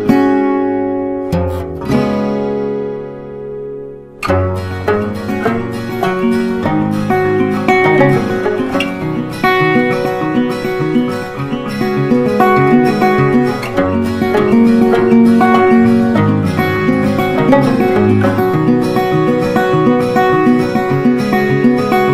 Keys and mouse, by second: 0.6 click, 3.7 g, 5.2-8.0 drag, 13.2 click, 15.7-22.1 drag.